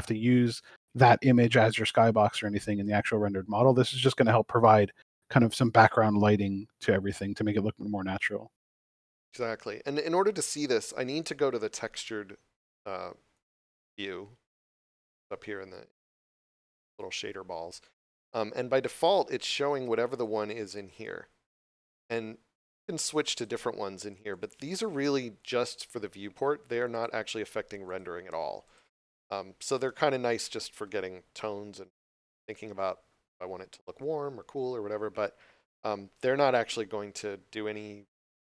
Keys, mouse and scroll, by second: 0.1 click, 13.3 click, 17.1 scroll down 1, 18.3 middle click, 20.1 click, 29.8 middle click.